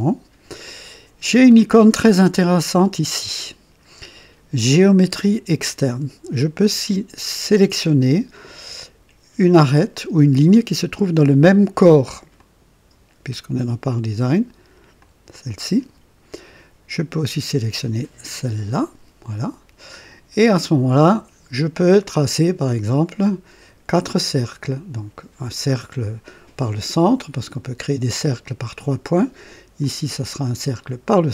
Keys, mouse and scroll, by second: 12.4 click, 15.0 click, 18.4 click, 19.0-19.8 scroll up 1, 27.5 click, 29.8 click, 30.8 click.